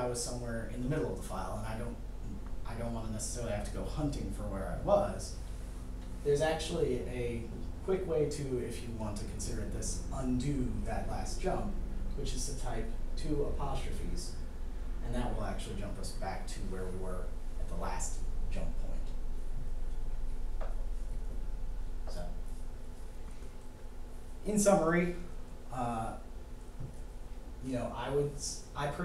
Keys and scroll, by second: 12.4 ', 14.2 '.